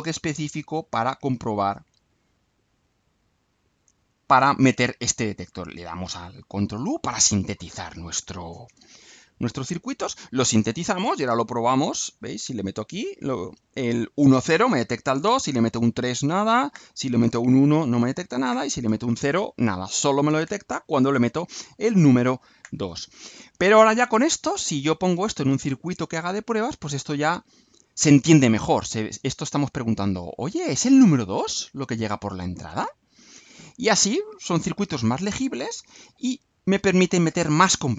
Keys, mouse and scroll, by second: 0.7 click, 2.2 right click, 3.0 scroll down 1, 3.5 right click, 5.3 ctrl+click, 5.9 ctrl+u.